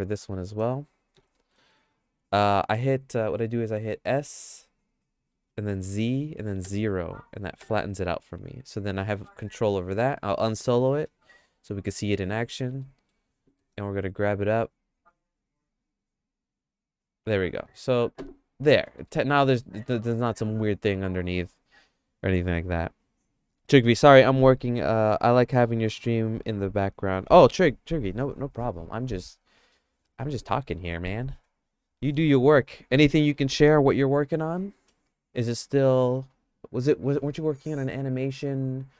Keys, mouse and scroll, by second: 1.3 middle click, 1.7 shift+middle click, 5.3 s, 10.3 KP_Divide, 10.9 middle click, 11.5 shift+middle click, 12.8 middle click, 13.5 g, 17.7 Tab, 18.9 middle click, 19.2-22.3 shift+middle drag.